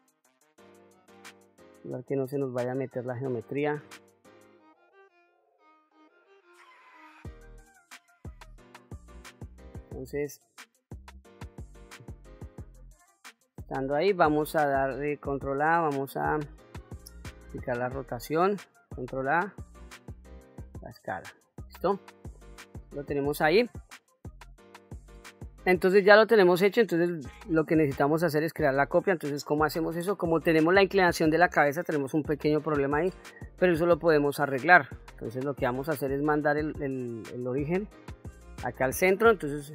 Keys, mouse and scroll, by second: 0.4-3.1 drag, 4.4 KP_7, 5.6-7.2 drag, 7.8 click, 10.6 scroll up 1, 11.1 middle click, 11.9-12.7 scroll up 1, 12.8-13.3 shift+middle drag, 15.3 ctrl+a, 17.7 ctrl+a, 17.8 ctrl+a, 22.5-23.0 scroll down 1, 23.0-23.7 scroll down 2, 23.9-24.5 shift+middle drag, 26.3 click.